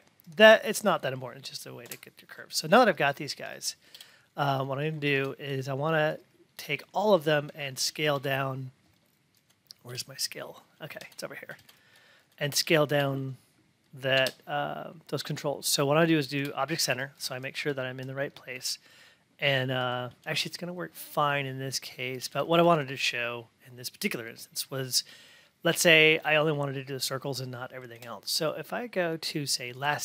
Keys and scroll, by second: 1.8 F8.